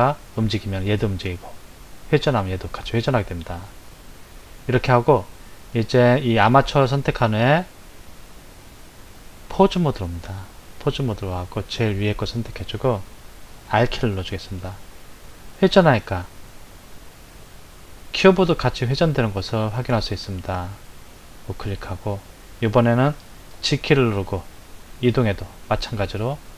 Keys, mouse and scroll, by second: 4.7 click, 6.0 click, 8.7-11.8 drag, 14.1 r, 23.5 g.